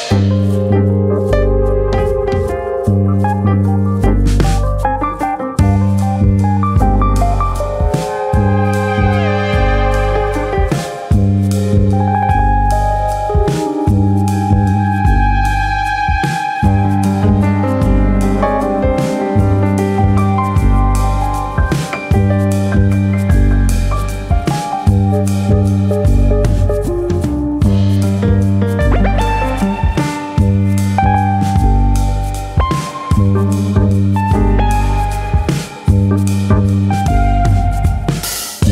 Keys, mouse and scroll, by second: 0.7 x, 2.2 middle click, 2.7-3.2 scroll down 2, 2.9 middle click, 3.2-4.6 shift+scroll up 3, 3.4 shift+middle click, 4.6 2, 4.8 click, 5.0 middle click, 5.4 click, 7.1 click, 8.7 click, 8.7 middle click, 9.5 middle click, 10.4 1, 10.5 click, 10.7 middle click, 11.3 click, 12.2 click, 13.4 middle click, 13.8 shift+middle click, 14.3 middle click, 15.3 click, 16.0 middle click, 16.4 middle click, 16.7 middle click, 17.1 shift+middle click, 17.3 shift+middle click, 17.9 alt+click, 18.2 middle click, 19.0 g, 21.4 click, 21.6 middle click, 22.0 middle click, 22.7 click, 22.9 middle click, 23.4 click, 24.3 middle click, 24.7 click, 24.9 middle click, 25.3 click, 26.1 middle click, 26.4 middle click, 27.0 click, 27.5 middle click, 28.0 click, 28.3 middle click, 29.0 click, 29.3 middle click, 30.0-32.5 scroll down 9, 30.2 middle click, 30.9 middle click, 31.4 middle click, 31.6 Tab, 32.0 shift+middle click.